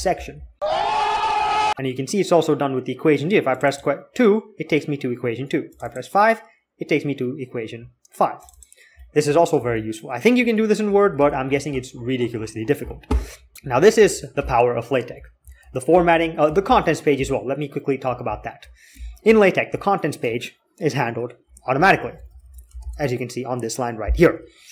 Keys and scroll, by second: 10.1 Escape, 10.7 a, 11.1 s, 14.0 alt+k, 15.2 j, 15.6 k, 16.5 alt+k, 17.2-19.5 typing, 21.5-23.1 typing.